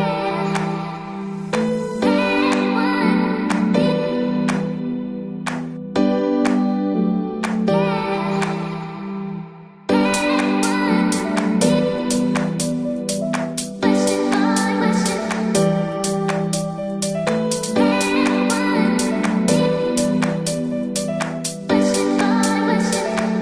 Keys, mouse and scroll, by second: 0.0 x, 0.1-3.4 middle drag, 1.3 Tab, 3.4 Tab, 4.4 a, 5.6-10.7 drag, 11.4-16.6 middle drag, 15.2 Tab, 16.5 Tab, 17.0-18.5 middle drag, 17.3-19.7 drag, 18.6-20.7 middle drag, 19.1 ctrl+z, 19.8-22.1 drag, 22.5 Tab, 22.8 middle click.